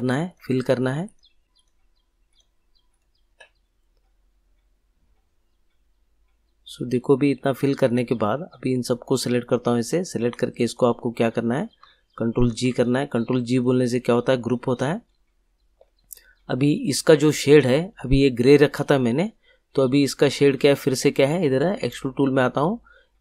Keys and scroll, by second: 12.4 ctrl+g.